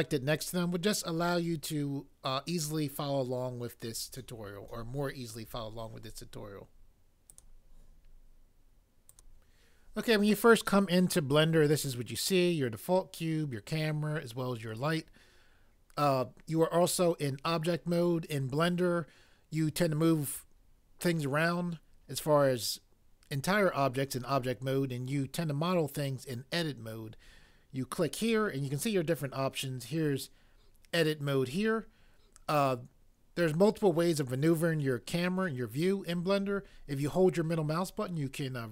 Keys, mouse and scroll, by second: 7.3 click, 9.1 click, 28.2 click.